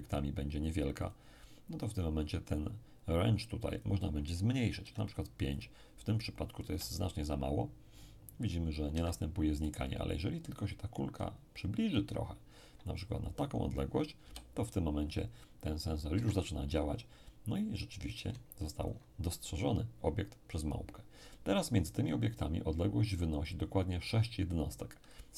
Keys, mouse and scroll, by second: 1.0 click, 3.8 click, 4.8 5, 5.5 click, 6.7 p, 8.9 Escape, 9.6-12.9 right drag, 10.6-12.9 drag, 14.2 p, 16.1 Escape, 18.2 ctrl+click.